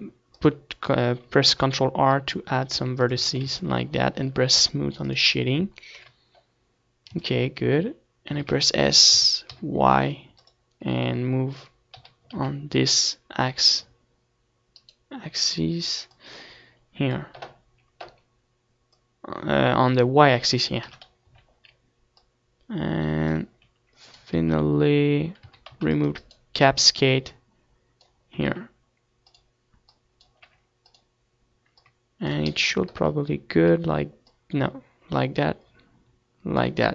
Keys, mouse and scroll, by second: 1.3 Tab, 1.3-4.9 drag, 1.6 ctrl+s, 4.1 KP_0, 4.9-6.6 middle drag, 5.1 ctrl+s, 6.4 s, 7.2-9.0 right drag, 7.3 s, 8.7-10.4 drag, 10.2 g, 13.2-14.6 right drag, 14.3-16.1 drag, 17.0-19.0 drag, 19.0 KP_3, 19.4 z, 19.6 middle click, 20.3-22.0 drag, 22.8 ctrl+z, 23.4-24.4 middle drag, 23.6 a, 23.9 c, 24.4-25.7 right drag, 25.0 click, 26.6 click, 26.6 r, 27.5-31.7 drag, 28.5 r, 30.4 z, 32.3-34.6 drag, 35.0 KP_0, 35.7-36.8 middle drag, 36.8-36.9 drag.